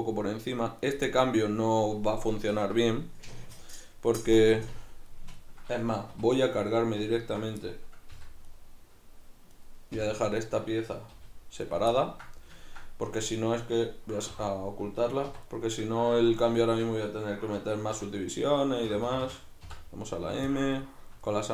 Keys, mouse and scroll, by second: 0.8 right click, 1.1-6.4 middle drag, 6.2 2, 6.4 right click, 7.2 ctrl+right drag, 7.6-8.6 middle drag, 8.2 v, 8.6 right click, 9.6 right click, 10.0 l, 11.8 right click, 12.0-14.4 ctrl+middle drag, 14.4 h, 15.3 1, 15.5 right click, 16.2 z, 16.6-18.0 shift+right drag, 18.0 m, 18.9 Escape, 19.6 m, 20.8-21.5 shift+middle drag.